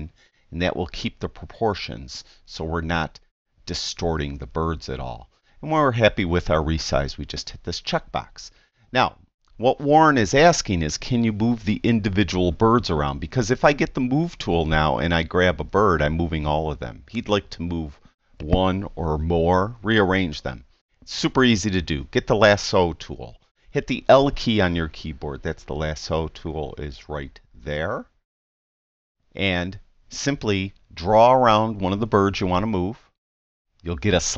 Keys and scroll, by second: 24.4 i.